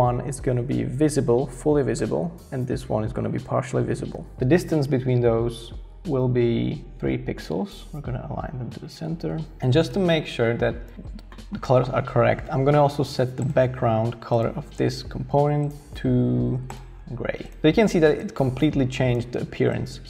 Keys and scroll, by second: 0.3 shift+Down, 1.1-4.8 typing, 7.9 shift+Up.